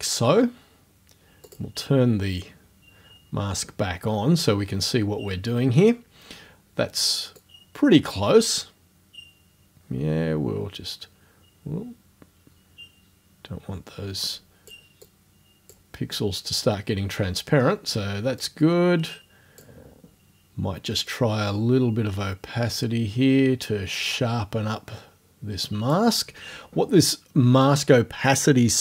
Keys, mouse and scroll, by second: 1.4 click, 7.4-14.9 drag, 15.0 click, 18.4-19.8 drag, 21.1-26.1 drag.